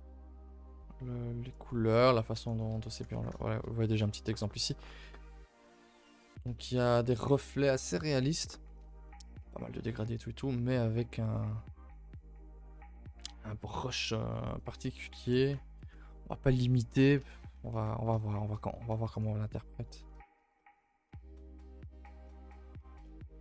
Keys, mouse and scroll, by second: 3.7-4.0 scroll up 3, 4.0-4.8 shift+middle drag, 4.8-5.5 scroll up 7, 5.1 shift+middle click, 5.6 middle drag, 5.9 scroll down 1, 5.9 shift+middle drag, 6.1-6.4 scroll up 4, 6.5 shift+middle drag, 6.8 scroll up 1, 8.5-9.6 scroll down 5, 10.3-11.5 scroll up 10, 14.9 scroll down 2, 15.1 a, 15.3 a, 15.7 ctrl+s, 16.3-17.1 scroll down 8, 17.1 a, 17.3 a, 17.7 ctrl+s, 18.3 shift+middle drag, 18.5 scroll down 3, 18.7 z, 19.5-19.8 middle drag, 19.8 a, 20.0 a, 20.2-20.7 shift+middle drag, 20.7-21.1 scroll up 4, 21.1-21.4 shift+middle drag, 21.4-22.2 scroll up 1, 22.2-22.8 scroll down 7, 22.8-23.4 shift+middle drag.